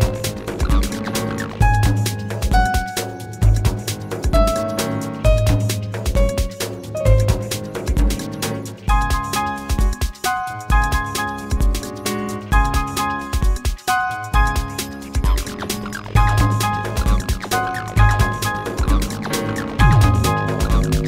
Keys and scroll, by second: 4.3 r, 9.9 w, 18.0 space.